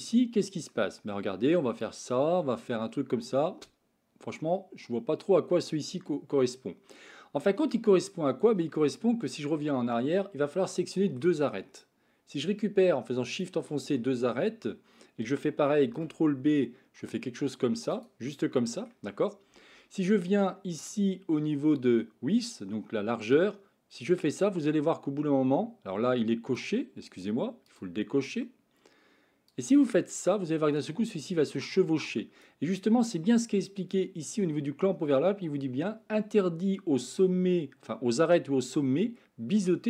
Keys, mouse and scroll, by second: 1.7-7.0 drag, 7.7-8.7 middle drag, 9.5 ctrl+z, 10.6 middle click, 13.3 shift+click, 14.0 middle click, 15.8 ctrl+b, 18.2 middle click, 23.4-26.6 drag, 27.7 click, 29.6-32.5 drag.